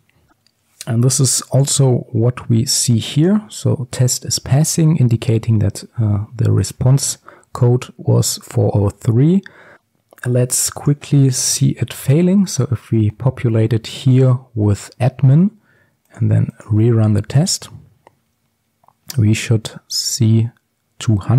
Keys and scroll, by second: 12.5 ctrl+s.